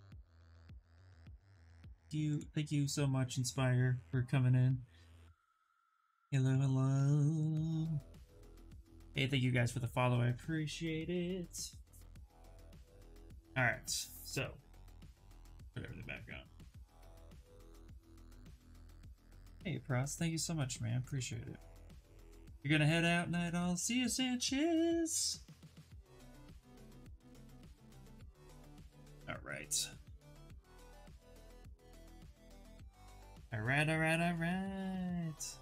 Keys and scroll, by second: 34.8 ctrl+n.